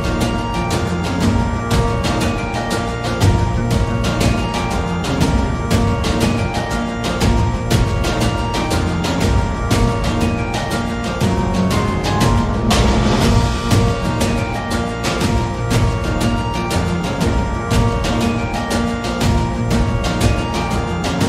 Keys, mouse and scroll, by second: 0.0-1.3 scroll up 1, 1.3 middle click, 3.2-4.5 drag, 4.9 middle click, 6.0 KP_Divide, 6.7 middle click, 7.2 click, 8.3-9.7 drag, 10.1 middle click, 11.0-12.3 drag, 12.3-13.6 middle drag, 14.0 click, 16.3 click, 17.1-18.8 drag, 18.8 middle click, 20.5 middle click, 20.5 a.